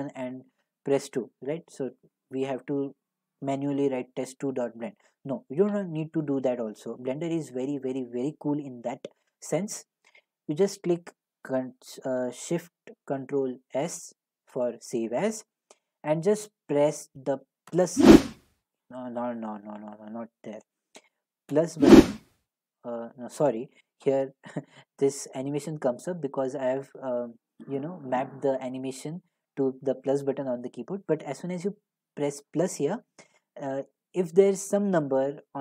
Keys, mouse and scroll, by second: 15.4 click, 18.6 click, 20.5 click, 22.4 click.